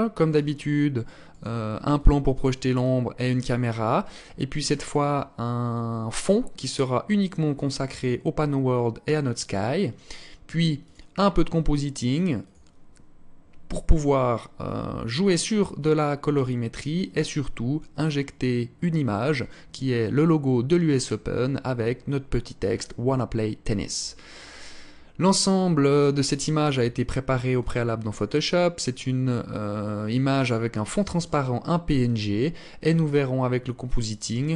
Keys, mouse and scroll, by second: 1.7 alt+click, 2.5 alt+click, 5.9 click, 10.6 click.